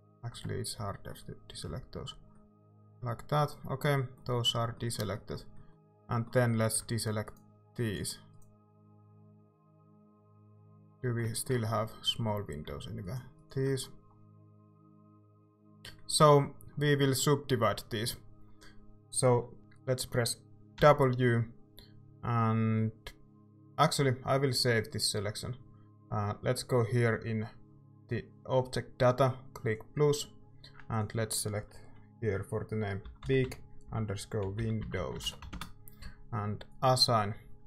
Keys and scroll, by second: 1.7 c, 20.8 w, 32.8-37.0 typing.